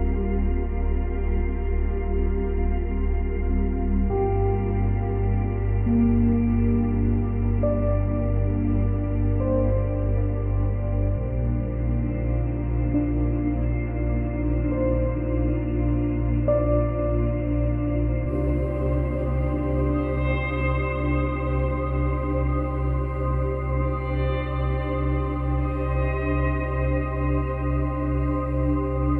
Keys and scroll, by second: 0.6 space, 1.7 space, 11.6 space, 13.0 space.